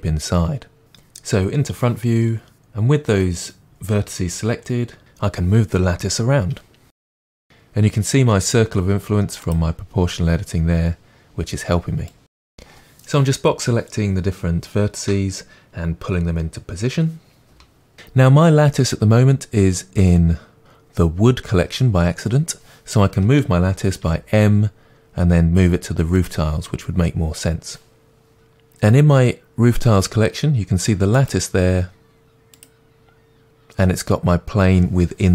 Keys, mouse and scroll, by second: 0.9 KP_1, 2.0 g, 4.7 click, 5.1 g, 12.3 click, 12.4 g, 12.7 middle click, 13.3 click, 13.5 g, 13.6 middle click, 13.9 click, 14.1 g, 14.4 click, 14.6 g, 14.9 click, 15.4 g, 15.7 middle click, 16.4 scroll down 2, 16.7 Tab, 17.9 middle click, 26.2 m, 28.3 click.